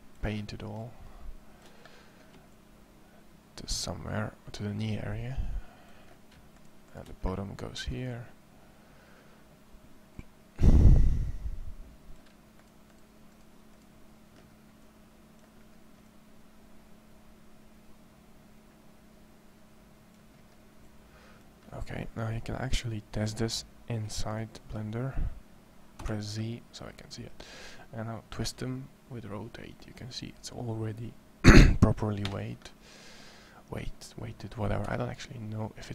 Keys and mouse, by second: 0.4-1.8 middle drag, 1.9 drag, 7.9-12.4 middle drag, 25.8 z, 28.2 r, 34.6-35.9 drag, 34.6 r.